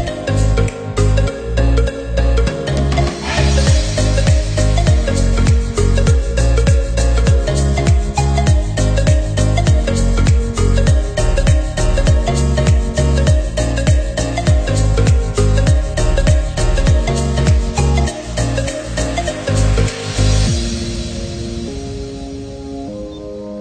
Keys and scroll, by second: 3.6 Up, 6.3 ctrl+c, 6.5 ctrl+v, 17.7 ctrl+=, 19.6 Up, 21.0 ctrl+0.